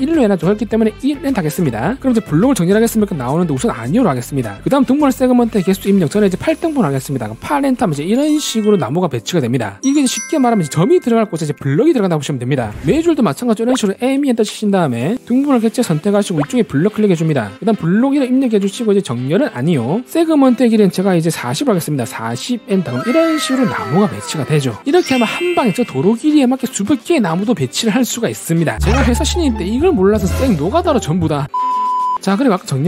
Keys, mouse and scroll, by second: 1.3 1, 4.4 click, 14.3 e, 15.9 click, 17.4 click, 18.5 1, 22.4 4.